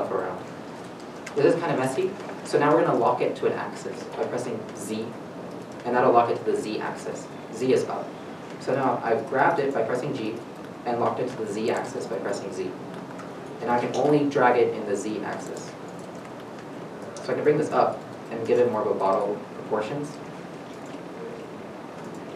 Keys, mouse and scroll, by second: 5.2 g, 5.2 z, 9.3 z, 9.3 right click, 9.6 g, 11.7 z, 18.4 shift+middle click, 18.8-19.3 scroll up 1, 19.3 scroll down 1, 19.9-20.5 scroll down 1, 20.5 middle click, 20.5-21.6 scroll up 1, 21.6-22.3 scroll up 2, 21.7 shift+middle click.